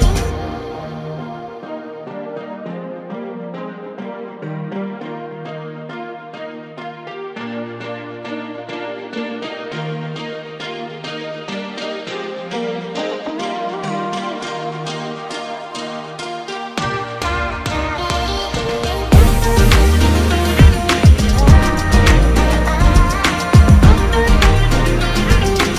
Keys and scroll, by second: 0.2 ctrl+shift+x, 0.6 ctrl+f, 4.9 alt+shift+space, 9.8 ctrl+x, 10.1 ctrl+f.